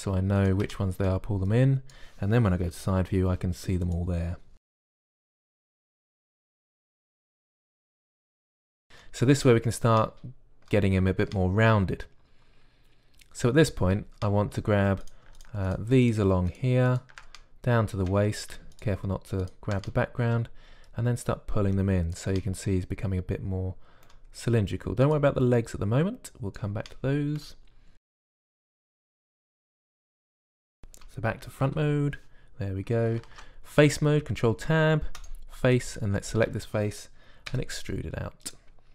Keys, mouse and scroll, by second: 2.3 middle click, 3.0 click, 3.6 KP_3, 4.6 click, 4.6 g, 4.8 g, 5.0 g, 5.2 g, 6.7 click, 7.7-13.8 drag, 21.8-23.5 middle drag, 23.5 click, 25.9 click, 27.8 middle click, 28.0 click, 29.0 click, 32.5 KP_1, 34.1 ctrl+Tab, 37.3-38.9 drag, 38.3 e.